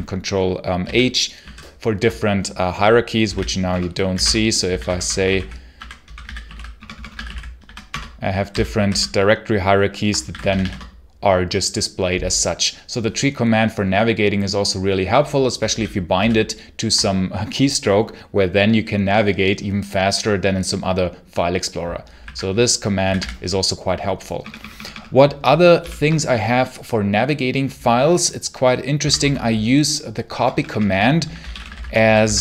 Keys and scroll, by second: 0.7 ctrl+j, 1.3 ctrl+h, 2.9-8.0 typing, 8.3 ctrl+j, 8.7 ctrl+h, 9.8-10.6 typing, 15.6 ctrl+k, 16.0 ctrl+j, 21.8-22.9 typing, 24.3 BackSpace, 25.6 ctrl+l, 28.6-32.4 typing.